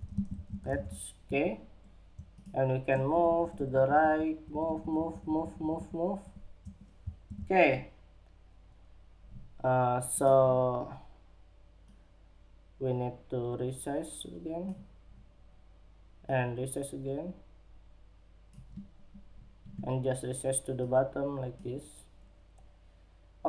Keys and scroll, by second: 0.6 Escape, 6.6 super+-.